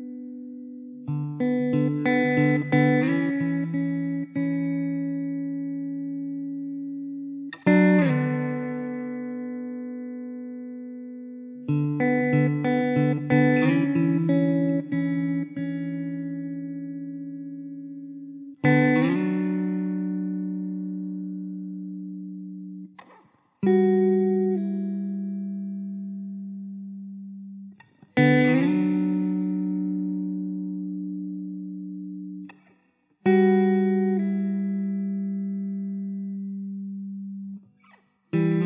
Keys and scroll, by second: 1.4 ctrl+j, 3.0 ctrl+j, 4.7 ctrl+j, 8.6 ctrl+s, 20.2 Tab, 20.6 l, 21.1 l, 21.5 s, 22.7 Tab, 24.6 shift+d, 25.6 `, 27.3 shift+d, 33.2 ctrl+z, 35.3 shift+d, 35.9 `.